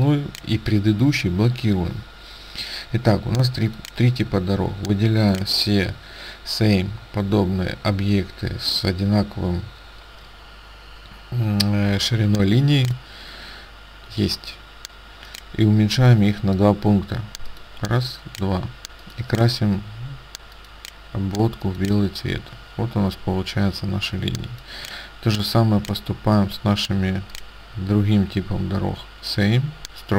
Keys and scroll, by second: 24.3 space.